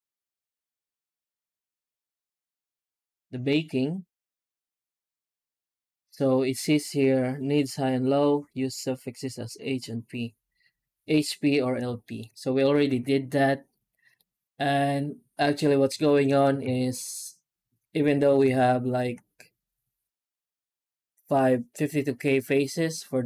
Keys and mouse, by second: 0.9 click, 1.7 click, 2.4 click, 2.9 click, 11.9 shift+middle click, 12.4 right click, 12.8 Tab, 14.0-15.4 middle drag, 15.9 shift+middle click, 16.5 alt+a, 17.7 Tab, 18.1 alt+middle click, 18.4 Tab, 18.9 a.